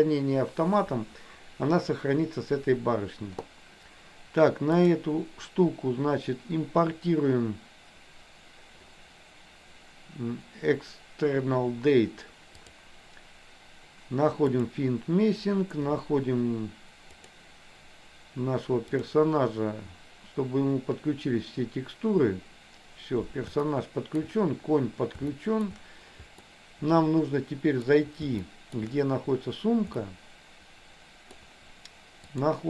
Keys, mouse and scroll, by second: 4.8-11.6 drag, 12.6-14.9 drag, 19.2 click, 23.7 shift+middle click, 25.5 shift+middle click, 26.5-27.9 middle drag, 28.6 shift+middle click, 30.1-31.5 middle drag, 32.3-32.6 drag.